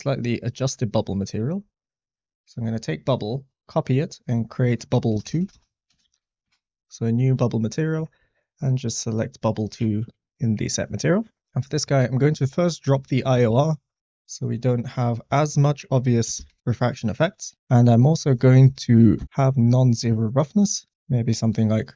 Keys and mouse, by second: 2.2 click, 4.0-6.4 drag, 5.2 BackSpace, 5.4 BackSpace, 7.8 middle click, 9.0-10.8 drag, 11.6 middle click, 13.0 click, 13.5 click, 14.8-16.4 drag, 17.3 click, 18.4 click, 20.3 click, 21.6-21.9 drag.